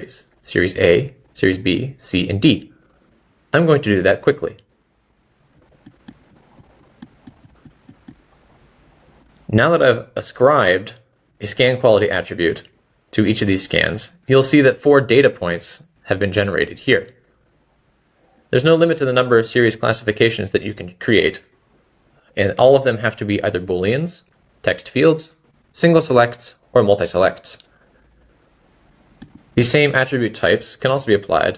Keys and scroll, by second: 7.3 Escape, 22.1 Escape.